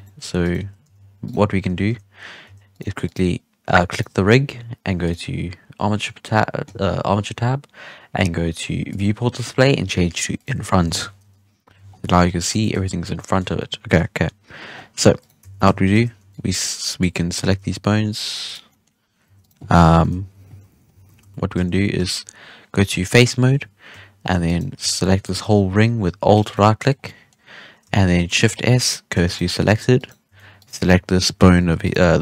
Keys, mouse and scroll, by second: 0.0-0.4 middle drag, 0.4 right click, 0.5 Tab, 0.8 z, 1.2 right click, 1.8 z, 2.4 z, 2.7 right click, 3.0 right click, 3.8 right click, 5.0-8.0 drag, 8.8-10.8 drag, 10.8 alt+a, 11.2 KP_3, 11.6 z, 11.8 scroll down 3, 12.0 middle drag, 12.2 scroll up 1, 12.4 scroll down 1, 12.5-13.3 shift+middle drag, 13.3-14.1 scroll down 1, 14.1 KP_3, 14.7-15.1 scroll up 5, 15.1 right click, 15.4 Tab, 15.9 alt+a, 16.1 1, 16.2 click, 16.9-17.4 drag, 17.4 g, 18.6 scroll down 1, 18.6-19.2 middle drag, 19.2 Tab, 19.3 right click, 20.0 KP_1, 20.3 Tab, 20.6 shift+middle click, 20.8 scroll up 5, 20.9 alt+a, 21.2 3, 21.5 z, 21.9 3, 23.0-24.4 drag, 24.4 alt+shift+right click, 26.3 alt+right click, 26.9 scroll down 2, 27.0-27.3 middle drag, 27.3-28.3 scroll up 1, 28.3 shift+s, 29.3-29.6 middle drag, 29.6 Tab, 29.9 right click, 30.2 Tab, 30.5 right click, 31.5 g.